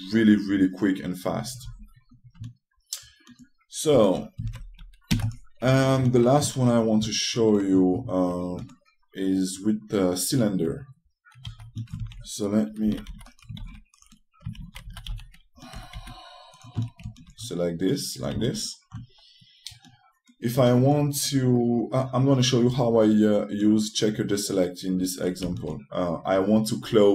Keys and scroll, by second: 5.3 shift+space, 5.8 x.